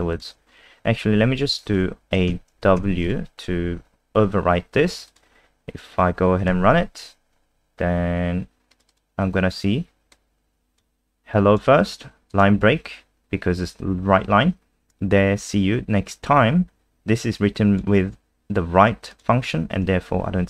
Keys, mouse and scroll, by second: 2.0 BackSpace, 2.3 w, 2.8 ctrl+s, 3.0 click, 5.1 click, 6.5 F5, 8.7 click, 8.9 click, 10.1 click.